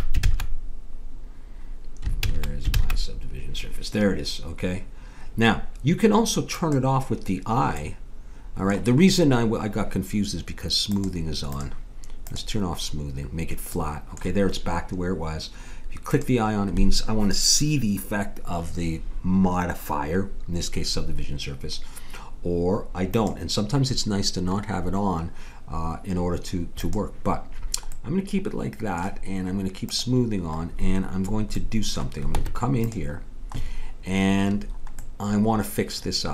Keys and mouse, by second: 0.2 ctrl+z, 2.2 ctrl+z, 2.8 ctrl+z, 6.5-8.4 drag, 8.4 middle click, 10.9-14.1 drag, 14.1-16.1 middle drag, 16.1-17.8 drag, 23.1-24.9 drag, 26.8-28.6 drag, 29.8 click, 32.4 Tab.